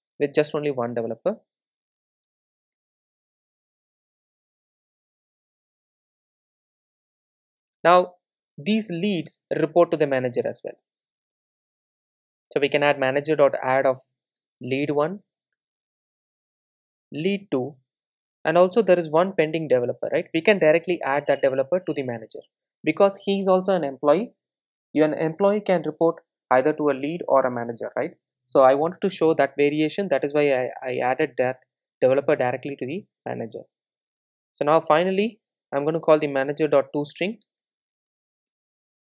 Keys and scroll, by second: 10.8 Return, 18.6 super+d, 23.9 Return, 35.8 Return.